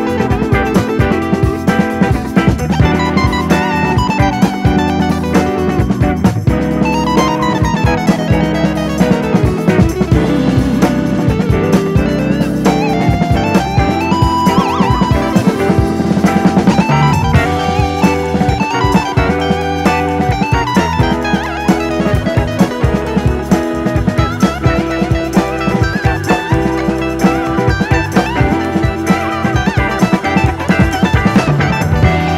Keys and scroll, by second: 6.3-7.2 typing, 10.1 super+d, 12.0 BackSpace, 14.7 BackSpace, 20.5-21.4 typing, 27.6 super+d.